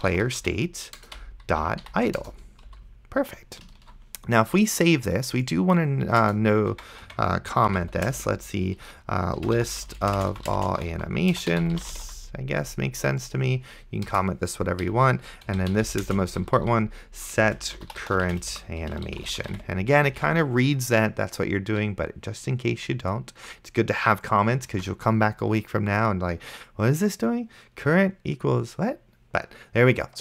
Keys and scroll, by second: 0.0-2.7 typing, 1.0 Return, 2.2 Return, 4.1 ctrl+s, 6.3 Return, 6.8 Tab, 7.7 /, 8.1 space, 9.4-12.6 typing, 14.1 Return, 14.9 Down, 15.5 Tab, 15.8-20.3 typing, 20.4 ctrl+s, 25.0 ctrl+s.